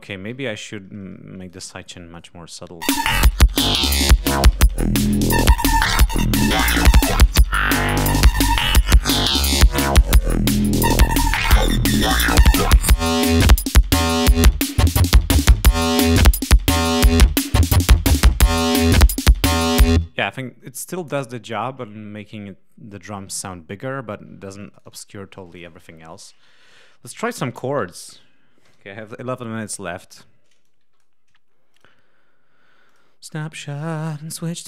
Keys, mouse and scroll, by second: 0.4 ctrl+scroll down 2, 1.3 click, 2.0 click, 2.6 space, 2.9 click, 3.8 click, 5.6-7.6 drag, 7.7 click, 10.2 click, 11.6 click, 12.3-13.7 drag, 16.2-17.2 drag, 17.8 click, 18.7-19.0 ctrl+scroll down 3, 19.5 scroll down 2, 19.8 space, 20.4 ctrl+scroll up 2, 24.5 click, 25.3 click, 27.2-28.5 typing, 28.6 shift+Return, 30.5 click, 31.6 click, 32.8 click, 34.2 click, 34.5 click.